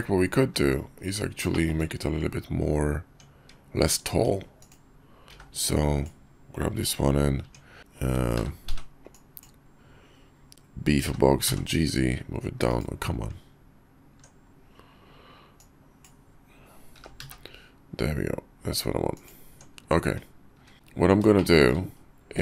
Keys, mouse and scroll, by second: 0.4 `, 0.9 KP_5, 1.6 shift+middle click, 2.2 Tab, 3.5 Tab, 5.3 b, 7.4 Tab, 7.8 n, 8.3 n, 8.6 b, 11.0 g, 13.3 Tab, 15.7 click, 17.0 g, 19.5 Tab, 20.1 `, 20.6 `, 20.7 Tab, 21.4-21.7 shift+middle drag.